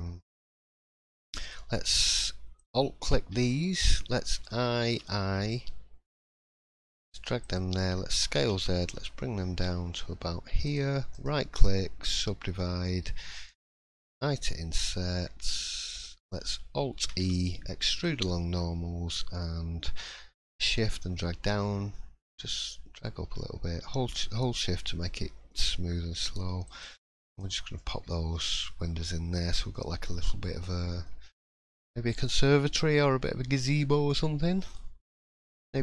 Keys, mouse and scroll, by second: 0.4 middle click, 2.6 alt+click, 3.5 shift+middle click, 4.3 i, 11.1 right click, 13.9 i, 17.4 alt+e, 27.3 click, 27.7 middle click, 28.3 scroll down 2, 28.6 middle click, 29.1 scroll up 1, 29.5 shift+middle click, 29.7 scroll up 2, 30.0 middle click, 31.1 scroll down 2, 32.3 middle click, 32.8 scroll up 1, 33.5 shift+middle click, 34.1 middle click, 34.7 scroll down 1, 35.1 shift+middle click, 35.6 shift+scroll up 1, 35.7 scroll down 1.